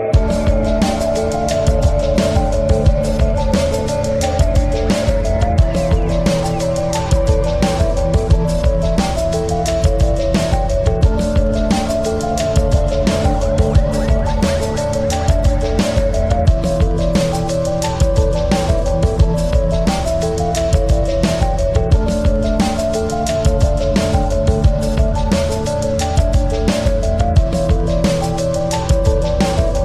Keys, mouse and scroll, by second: 1.4 click, 2.1 click, 6.1-6.5 scroll down 1, 7.9-9.9 drag, 11.1 click, 13.2 click.